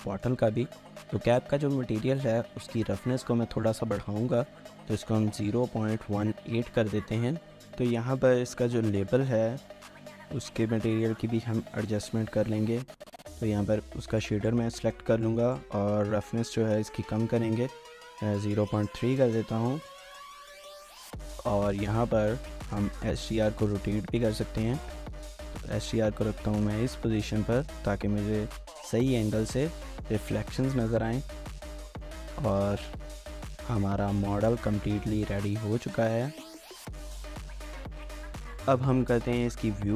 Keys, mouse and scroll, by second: 0.1 shift+middle click, 3.1-3.7 scroll up 1, 3.7 middle click, 3.8-5.1 scroll up 1, 4.8-6.2 typing, 6.5 Return, 9.3 middle click, 12.2-13.3 scroll up 1, 13.3 middle click, 19.0 scroll down 1, 19.2 shift+middle click, 27.5 middle click, 28.0 scroll up 1, 28.2 shift+middle click, 28.8 scroll up 1, 28.9 shift+middle click, 29.7 middle click, 30.4 shift+middle click, 31.3 shift+middle click, 32.7 scroll up 1, 33.1 shift+middle click, 35.1 shift+middle click, 35.8-37.4 scroll up 1, 37.4-37.7 scroll down 1, 37.8 shift+middle click, 38.2 scroll down 1, 38.4 shift+middle click.